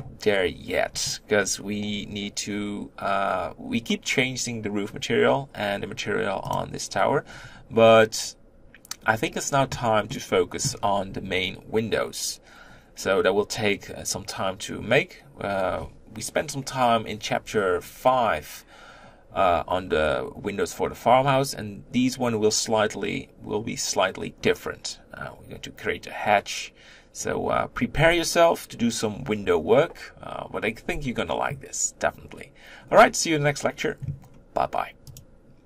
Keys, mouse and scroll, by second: 6.4 click, 10.0-35.3 middle drag, 35.4 middle click.